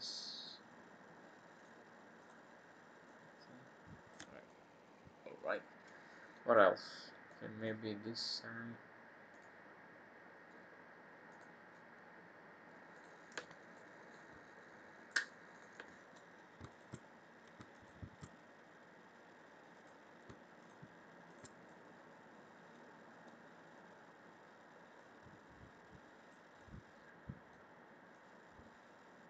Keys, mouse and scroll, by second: 0.4 click, 1.6 click, 2.1 click, 3.0 click, 4.4 middle click, 6.5 middle click, 7.2 middle click, 9.3 click, 11.2 click, 12.9 click, 13.7 middle click, 15.5 click, 16.6 alt+shift+click, 19.7 click, 20.5 shift+click, 21.2 click, 21.6 middle click, 23.2 middle click, 25.0 click, 26.6 middle click, 28.1 click.